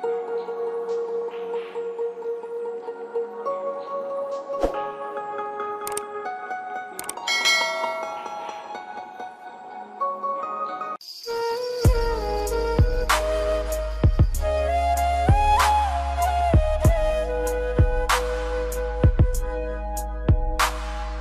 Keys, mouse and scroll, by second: 0.6 F4, 2.9 click, 3.5 scroll down 1, 4.8 click, 7.6 F4.